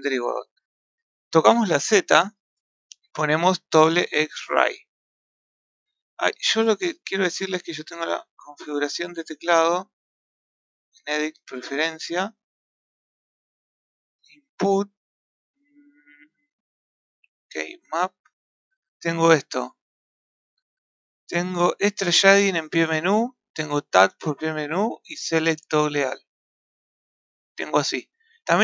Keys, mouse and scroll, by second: 7.1-10.1 drag, 10.7-13.7 drag.